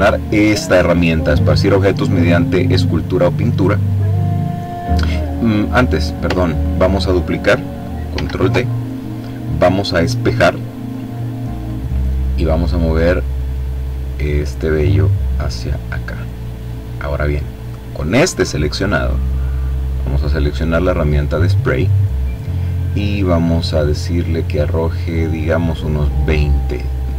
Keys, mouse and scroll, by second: 3.5 click, 5.3 click, 6.0-6.7 ctrl+scroll up 2, 7.8 ctrl+d, 11.3 click, 13.5-16.8 drag, 17.5 click, 19.8 click, 23.7-25.8 drag, 26.6-27.1 drag.